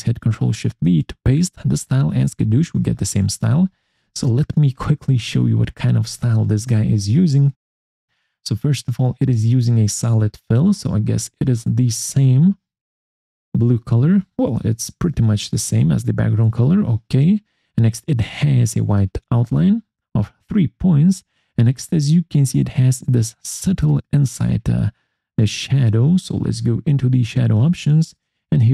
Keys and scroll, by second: 6.2 alt+4.